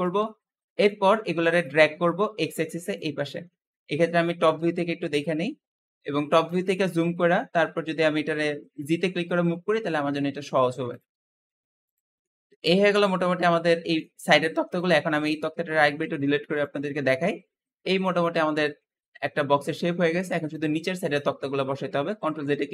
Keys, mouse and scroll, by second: 0.1-1.4 middle drag, 1.4 click, 3.9 KP_7, 4.5 KP_Decimal, 5.2-6.3 scroll up 4, 6.3-7.1 scroll down 8, 7.1-8.1 scroll up 9, 8.1 g, 11.0-11.7 scroll down 7, 11.7 click, 12.1-14.1 middle drag, 14.1-14.6 scroll down 4, 14.6 click, 15.8 x, 16.9-19.9 middle drag, 22.1 ctrl+z.